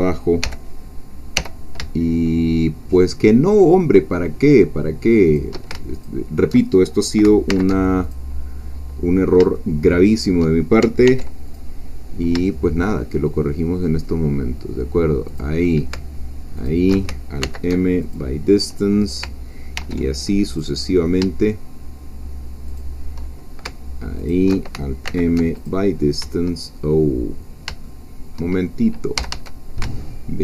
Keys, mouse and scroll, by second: 0.4 g, 1.4 y, 5.2 shift+click, 5.9 alt+shift+click, 7.5 alt+m, 8.0 alt+click, 9.1-9.4 scroll down 2, 9.5 shift+middle click, 11.0 ctrl+r, 11.5 ctrl+click, 15.3 shift+click, 16.6 alt+shift+click, 17.4 alt+m, 18.0 alt+click, 19.8 ctrl+r, 20.5 click, 22.7 shift+click, 24.3 alt+shift+click, 25.1 alt+m, 25.6 alt+click, 26.9-27.5 shift+scroll up 4, 27.8 shift+middle click, 28.6 shift+scroll up 2, 29.2 a, 29.8 alt+shift+a.